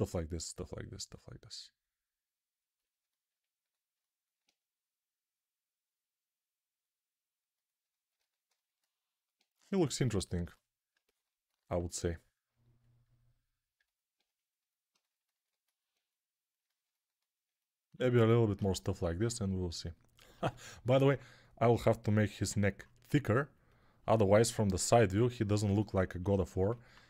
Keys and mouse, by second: 20.9 alt+q.